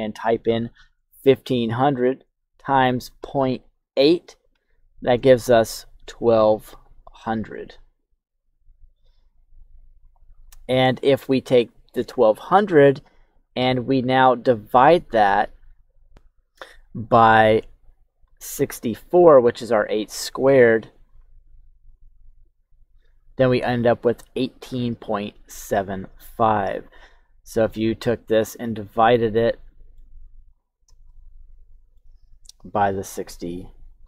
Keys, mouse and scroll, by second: 6.0 click, 6.6 click, 7.4 click, 8.3 click, 27.5 click, 29.0 middle click, 30.2 KP_1, 31.0 shift+middle click, 32.5 click, 33.6 click.